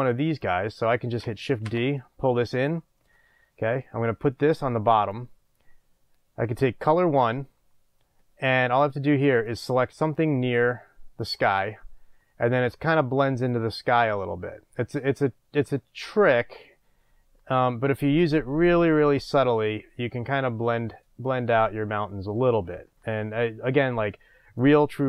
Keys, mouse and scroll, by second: 0.7 click, 1.7 shift+d, 2.8 click, 3.2-3.7 scroll up 1, 4.6 drag, 6.9 click, 13.6-25.0 drag.